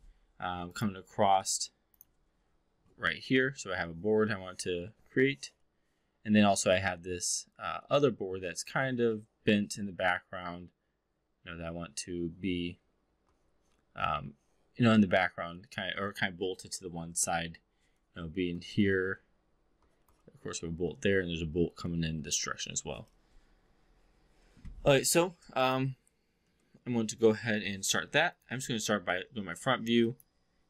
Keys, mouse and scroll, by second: 28.2 click, 28.5 v, 30.1 click.